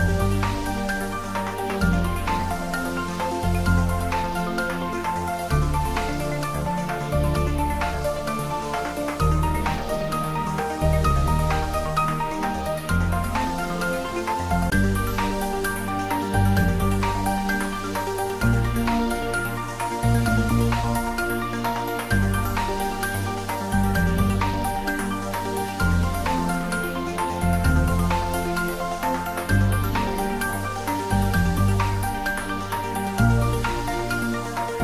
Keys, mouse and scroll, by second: 7.2-7.8 scroll down 1, 10.0 click, 12.2 click, 14.8 click, 19.5 click, 20.0 click, 25.4-26.0 scroll up 1, 28.5-32.7 drag, 32.7-34.8 drag.